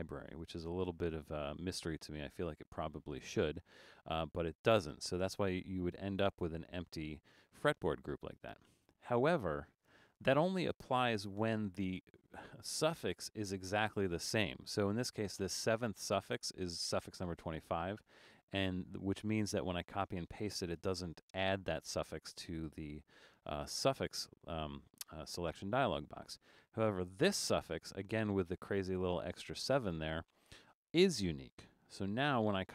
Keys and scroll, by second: 7.1 super+z, 31.9 super+c.